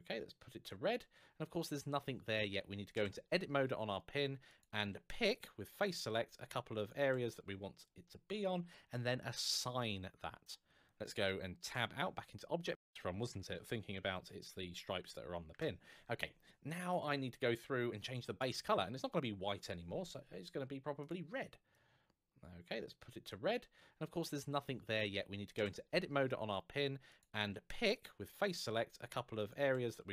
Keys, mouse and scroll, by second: 2.7 Tab, 4.2 alt+click, 5.1 click, 5.5 click, 5.8 alt+click, 6.5 alt+shift+click, 7.9 shift+scroll up 2, 11.5 Tab, 12.1 scroll down 1, 12.7-13.8 typing, 15.3 Return, 16.4 scroll down 1, 18.1 click, 20.8 click, 25.3 Tab, 26.8 alt+click, 27.7 click, 27.8 click, 28.4 alt+click, 29.1 alt+shift+click.